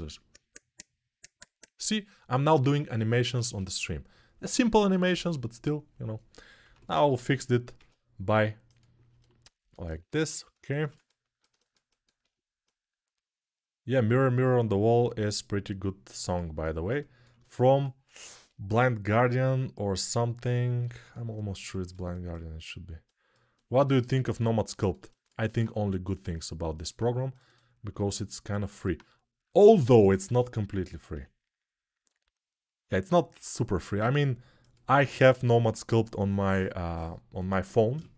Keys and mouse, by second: 3.1 ctrl+z, 6.3-10.7 ctrl+right drag, 6.5 ctrl+Tab, 7.5 ctrl+a, 9.9 Tab, 10.7-25.9 ctrl+alt+drag, 25.5 2, 25.9 middle click, 26.1 click, 26.1 shift+middle click, 27.0 click, 27.1 middle click, 27.2 click, 27.3-38.1 middle drag, 30.8 e.